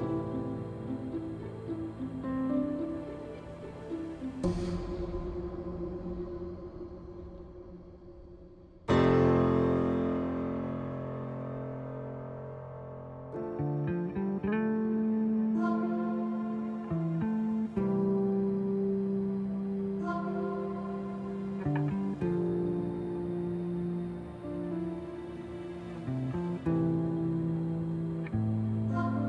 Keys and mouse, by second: 0.3 middle click, 3.1 Tab, 4.2 click, 7.2 middle click, 8.6-11.9 drag, 12.7-16.2 drag, 13.5 KP_0, 16.9 g, 17.4 middle click, 18.4 Tab, 18.4 middle click, 20.9 middle click, 21.8 middle click, 22.9 click, 23.9 click, 26.2-28.5 drag, 28.9 shift+d.